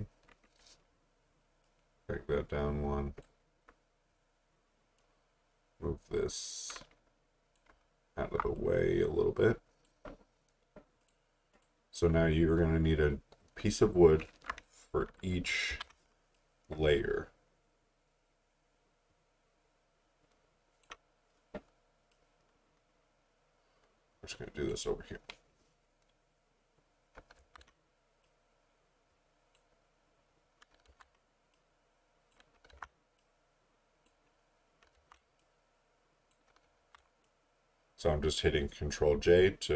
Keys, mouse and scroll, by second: 1.6 click, 7.8 alt+scroll down 1, 8.6 click, 15.7 ctrl+j, 16.3 click, 26.1-26.5 scroll down 1, 26.5-27.2 scroll up 1, 27.4 ctrl+j, 28.2 click, 30.0-30.7 scroll down 1, 30.9 ctrl+j, 31.5 click, 32.7 ctrl+j, 33.2 click, 34.4-34.8 scroll down 1, 35.0 ctrl+j, 35.4 click, 36.7 ctrl+j, 37.2 click.